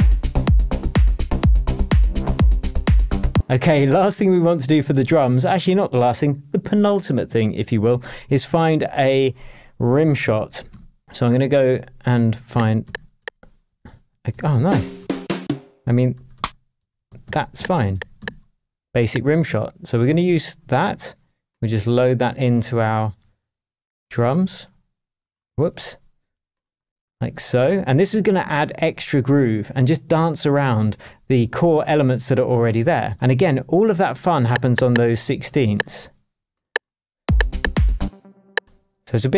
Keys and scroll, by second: 3.3 space, 3.6 super+s, 9.8-11.2 typing, 11.8 Down, 12.2 Right, 12.5 Down, 13.2 Up, 13.9 Right, 14.3 Up, 14.6 Down, 16.1 Right, 16.3 Down, 16.8 Up, 17.5 Down, 17.9 Up, 18.2 Down, 37.2 space.